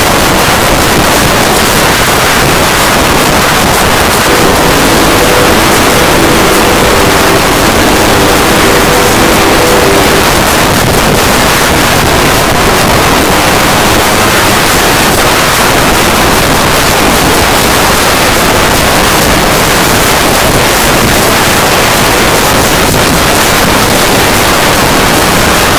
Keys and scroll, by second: 10.2 Page_Down.